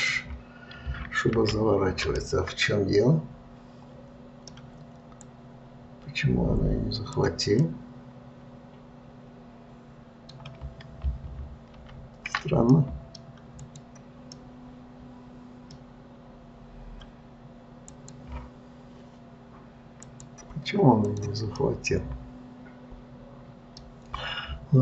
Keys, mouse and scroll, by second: 2.5-5.6 middle drag, 5.6 click, 8.0-11.0 middle drag, 13.1 middle click, 14.0 click, 14.7-17.7 middle drag, 18.2 click, 20.4 click, 21.4 click, 21.9-24.8 middle drag.